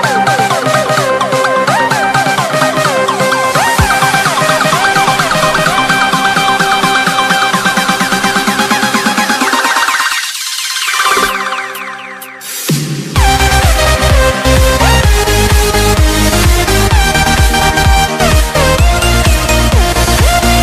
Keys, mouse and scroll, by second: 0.0 Right, 0.2 Down, 0.7 click, 5.6 scroll up 1, 6.0 click, 7.8 ctrl+c, 8.0 alt+Tab, 8.4 click, 10.0 BackSpace, 10.4 click, 11.0 click, 11.7 Return, 12.0-12.7 scroll down 3, 13.0-13.4 alt+scroll up 3, 13.5 Tab, 14.3 click, 15.9 ctrl+c, 16.0 Tab, 16.4 click, 17.7 2, 18.0 v, 18.5 click, 18.7 scroll down 1, 19.6 Tab, 20.0 click.